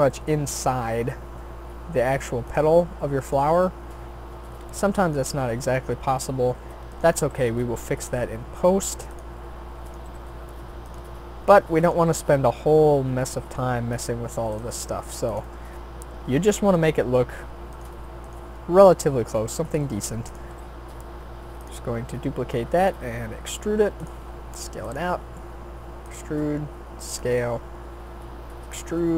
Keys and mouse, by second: 0.0 g, 1.4-3.4 drag, 3.5 g, 5.0 click, 7.3 g, 8.5-9.9 drag, 10.1 g, 11.8 right click, 12.1 g, 14.7 g, 19.3 shift+d, 20.5 r, 21.9 s, 23.3 e, 24.1 s, 25.0 g, 26.2 s, 27.3 e, 29.0 e.